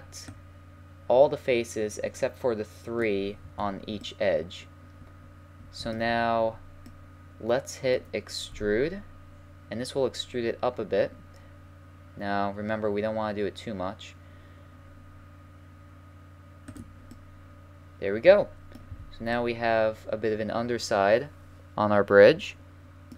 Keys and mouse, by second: 4.0 middle click, 5.2 middle click, 6.1-7.2 middle drag, 8.5 e, 17.1 middle click, 18.6-19.4 middle drag, 18.9 a, 19.4-21.5 middle drag, 22.3-23.1 middle drag.